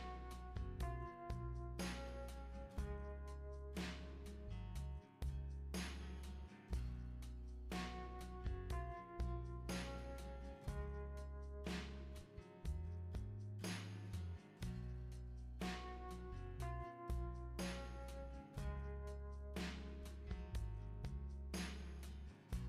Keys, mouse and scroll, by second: 1.6 click, 4.3-6.8 drag, 9.8 click, 11.7 click, 17.9 click.